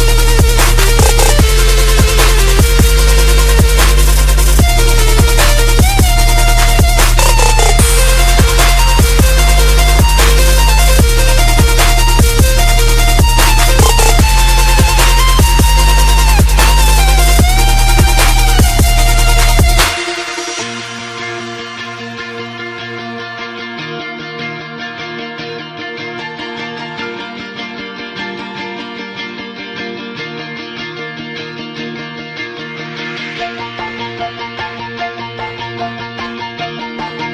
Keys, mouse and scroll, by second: 1.8-3.3 right drag, 3.4 click, 3.7-6.9 typing, 7.4 Return, 8.4 click, 9.4-11.3 typing, 12.0 Return, 13.0-15.8 drag, 15.8 right click, 16.2-16.8 scroll down 1, 16.9 click, 18.1-19.8 typing, 18.4 click, 21.0 click, 21.8 ctrl+c, 22.1 click, 22.8 v, 23.1-28.3 drag, 27.7-29.7 typing, 29.8 F10, 30.6 click, 31.7-35.0 typing, 36.4-37.3 drag.